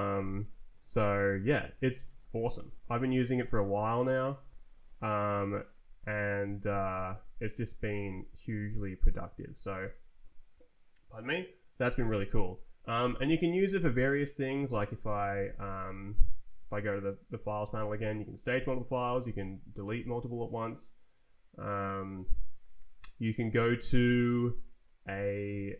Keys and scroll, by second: 0.8 Down, 1.2 Up, 1.5 shift+Down, 2.0 s, 2.8 ctrl+j, 3.3 ctrl+h, 3.6 ctrl+j, 4.8 ctrl+k, 5.8 ctrl+j, 7.0 Escape, 8.4 Return, 9.1 Up, 12.7 Up, 14.6 Down, 15.2 Down, 15.3 g, 15.4 Return, 15.9 Left, 16.2 Down, 17.0 shift+Down, 17.8 space, 19.2 d, 19.8 Return, 22.2 Right, 22.9 Down, 23.5 Left, 24.1 shift+d, 24.4 Return, 25.0 z, 25.4 Return.